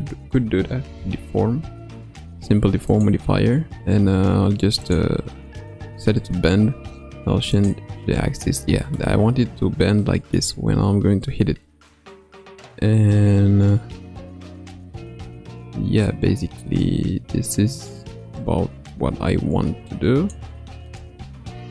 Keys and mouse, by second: 4.8 click, 7.6 click, 9.0-10.4 middle drag, 11.9-20.4 drag, 20.9-21.7 middle drag.